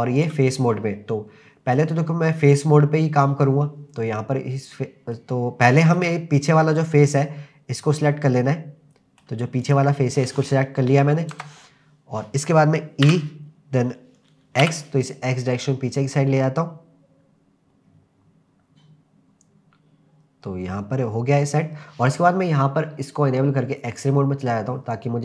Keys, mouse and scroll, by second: 0.2 click, 3.9-5.1 scroll down 2, 5.1 middle click, 6.9-9.3 middle drag, 9.7 click, 11.3 KP_0, 13.1 e, 14.3 n, 14.7 x, 21.5 click, 22.2-23.9 scroll up 2, 23.9 click.